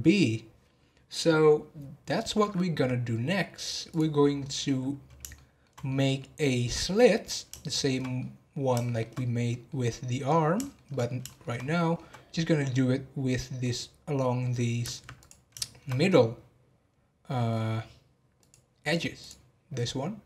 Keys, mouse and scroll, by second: 3.8 click, 4.3-4.7 scroll up 6, 5.3-9.2 shift+middle drag, 9.2 scroll up 1, 9.5-10.3 middle drag, 10.3 scroll down 1, 10.6-11.5 shift+middle drag, 11.5 scroll up 3, 11.8-15.1 middle drag, 15.1 click, 15.6-18.4 shift+middle drag, 18.4-20.2 drag.